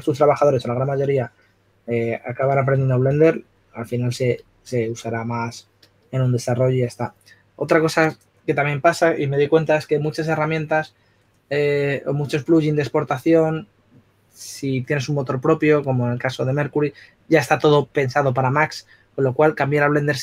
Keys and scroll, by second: 0.1 s.